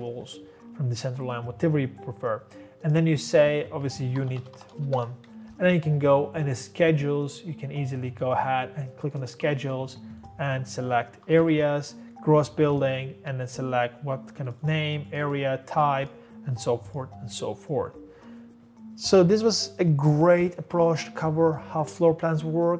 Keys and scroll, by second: 3.9-5.3 typing, 11.0-12.2 typing.